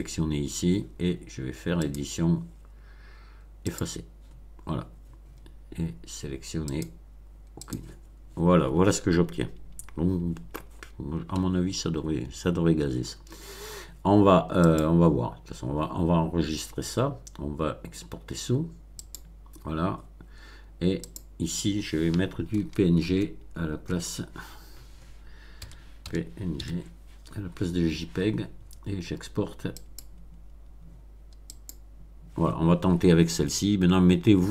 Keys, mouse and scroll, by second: 1.8 click, 3.6 click, 6.6 click, 7.5 click, 14.6 click, 19.0 click, 21.1 click, 22.5 BackSpace, 23.9 BackSpace, 25.6 p, 26.0 n, 26.6 g, 29.8 click, 31.5 click.